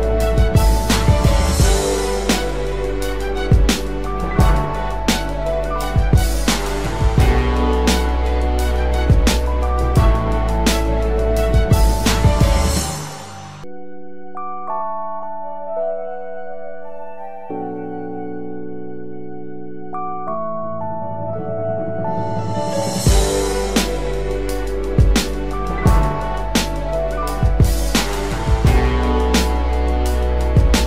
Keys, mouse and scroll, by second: 7.3 double click, 27.1 double click.